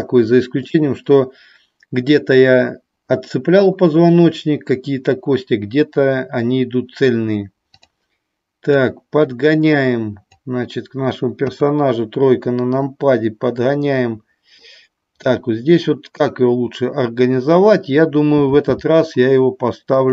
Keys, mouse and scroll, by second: 7.8 click, 8.9-10.4 drag, 11.5 KP_3, 12.7-14.6 drag, 19.9 click.